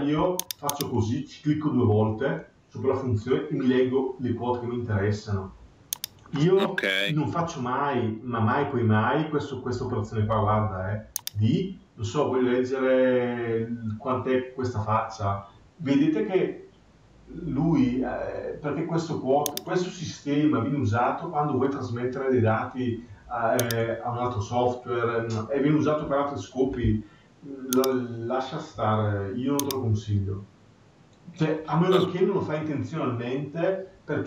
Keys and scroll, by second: 0.2 Escape.